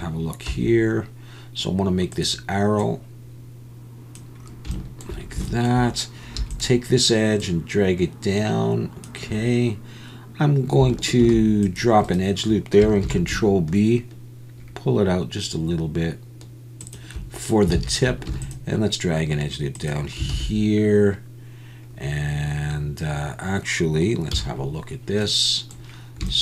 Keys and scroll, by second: 0.5 s, 11.2 ctrl+r, 13.1 ctrl+b, 17.8 alt+a, 18.3 ctrl+r, 20.3 alt+a, 24.3 z.